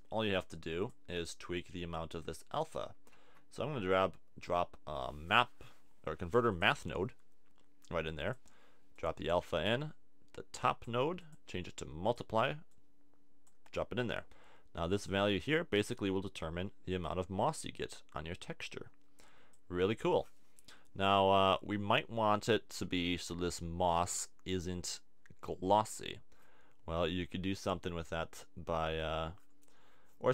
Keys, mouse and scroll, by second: 3.2 shift+a.